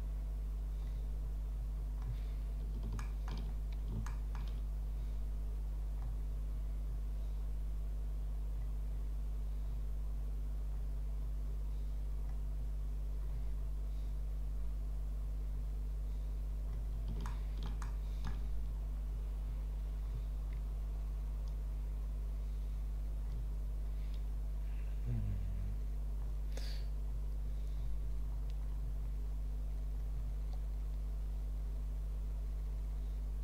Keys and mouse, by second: 3.0 shift+middle click, 4.1 shift+click, 17.2-18.8 shift+drag.